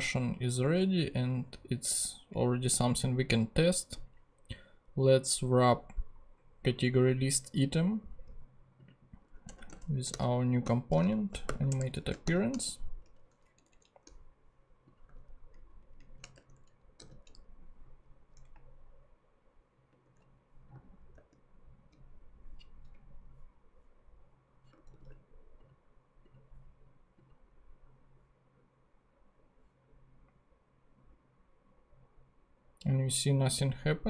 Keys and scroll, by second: 9.5 Return, 10.1-12.2 typing, 13.0 shift+Return, 13.5 Down, 14.0 shift+Down, 15.5 alt+shift+Up, 16.3 alt+shift+Tab, 16.6 Down, 17.0 super+x, 19.9 ctrl+Tab, 20.7 ctrl+super+Tab, 21.1 ctrl+super+Tab, 24.9 ctrl+super+z.